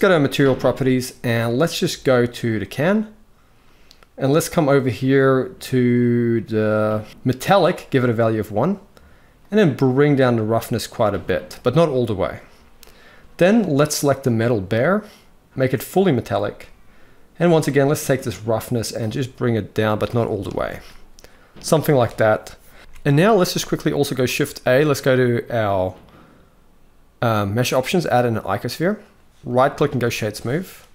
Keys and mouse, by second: 2.1 click, 7.3 click, 9.0-10.7 drag, 13.9 click, 15.6 click, 17.8-19.8 drag, 20.2 alt+a, 22.8 ctrl+s, 22.8 z, 23.9 shift+a, 29.1-29.6 right drag.